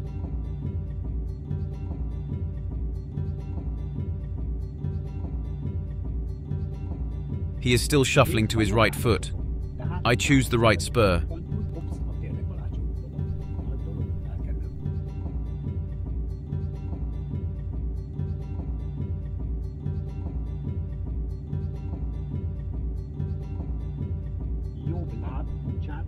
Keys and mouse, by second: 1.4-8.8 drag, 13.2-16.8 drag, 19.3-26.0 drag.